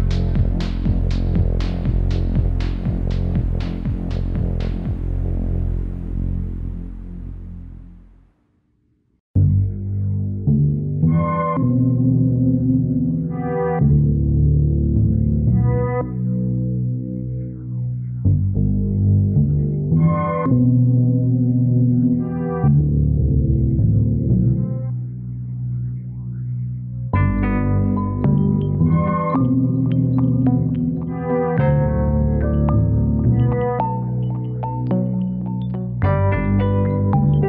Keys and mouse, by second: 15.2 shift+click, 18.3 s, 28.7 click, 30.1 click, 33.4 click, 36.1 click, 36.3 Tab.